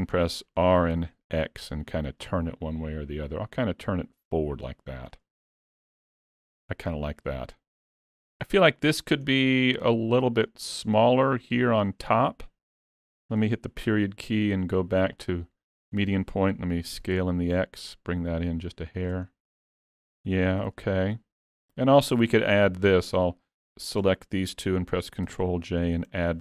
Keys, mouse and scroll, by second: 0.7 r, 5.6 alt+a, 5.8 Tab, 6.2-7.5 scroll down 5, 6.8 alt+a, 7.5 middle click, 8.5 click, 8.8-9.2 scroll up 1, 9.5-10.0 scroll up 2, 10.6 middle click, 16.0 middle click, 17.0 s, 19.3 scroll down 3, 19.7 middle click, 20.7 alt+a, 21.1 middle click, 22.5 click, 23.6 shift+click, 25.3 ctrl+j, 26.1-26.4 scroll down 2.